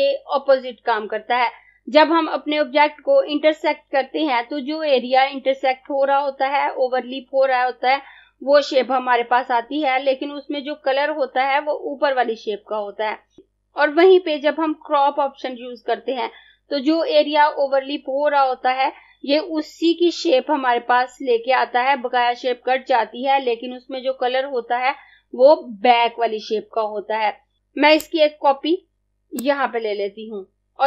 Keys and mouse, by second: 28.0 click.